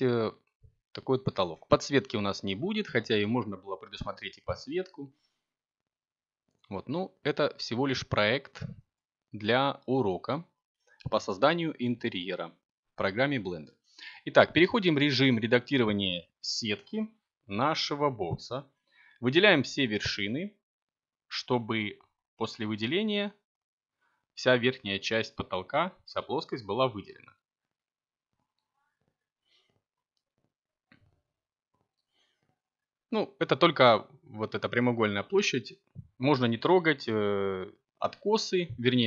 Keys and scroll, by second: 13.9 7, 18.6 7, 20.4 e, 23.2 s.